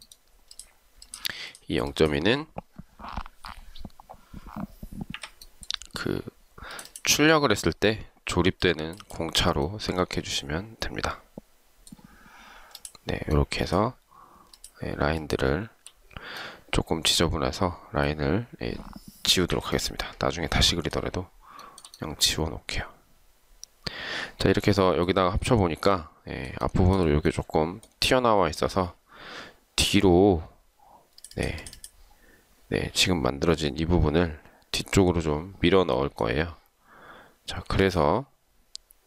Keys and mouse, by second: 5.3 Delete, 14.7 shift+click, 15.3 shift+click, 19.6 Delete, 21.8 shift+right click, 26.8 shift+right click.